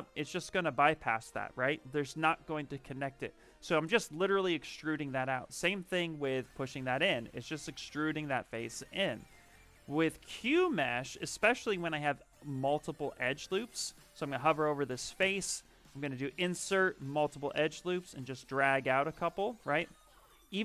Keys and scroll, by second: 9.6 z, 11.8 space, 15.1 space.